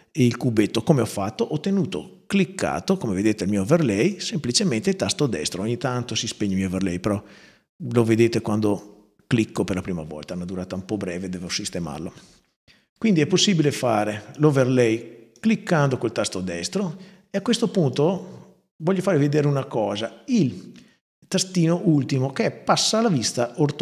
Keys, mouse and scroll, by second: 1.7-2.9 right drag, 3.9-4.9 right drag, 6.3-6.9 right drag, 8.6-9.0 right drag, 13.6-14.1 right drag, 14.6-15.1 right drag, 15.7-17.1 right drag, 17.7-19.1 right drag.